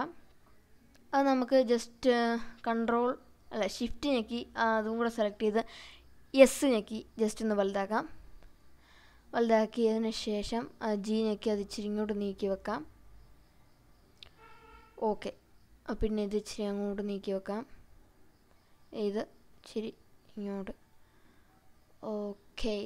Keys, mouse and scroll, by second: 3.3 shift+click, 5.6 g, 6.9 s, 10.2 click, 11.0 click, 12.5 g, 14.4 click, 15.5 click, 16.8 g, 18.0 click, 18.5 click, 19.6 g, 21.9 click.